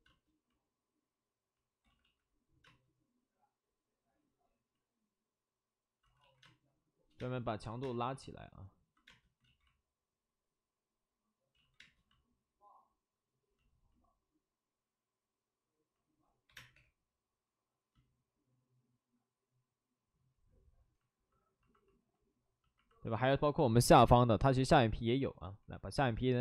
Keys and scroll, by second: 0.0 space, 1.8 ctrl+z, 2.6 ctrl+z, 2.6 space, 6.0 ctrl+z, 6.1 ctrl+z, 6.4 space, 9.3 space, 9.4 ctrl+z, 11.5 ctrl+alt+z, 11.8 space, 16.4 3, 16.7 space, 16.7 3.